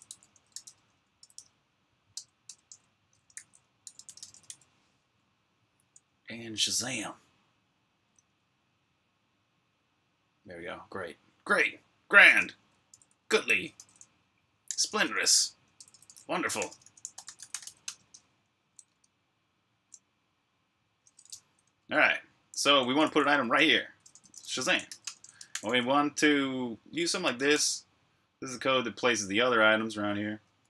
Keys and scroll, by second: 0.9-1.7 typing, 2.0 Return, 2.3 Return, 6.0-6.8 typing, 13.6 super+l, 14.2-18.1 typing, 18.7 super+Tab, 21.5-25.4 typing, 27.1 Escape, 27.1-27.9 typing, 30.1-30.6 typing.